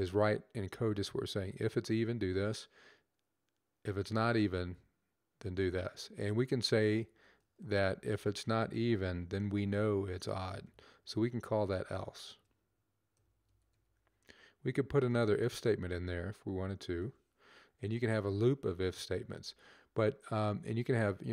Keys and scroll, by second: 6.3-7.9 typing, 9.0-10.5 typing, 11.8-14.8 typing, 16.3-17.0 typing, 17.4 Up, 17.5 Right, 17.8 Right, 18.1 Right, 19.5 Down, 20.3 Up, 20.6 Right.